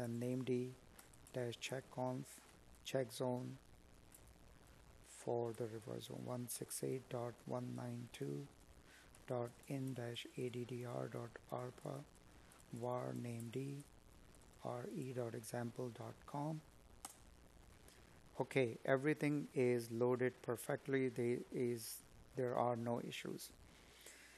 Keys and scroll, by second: 0.0 Tab, 7.7 space, 10.8 Tab.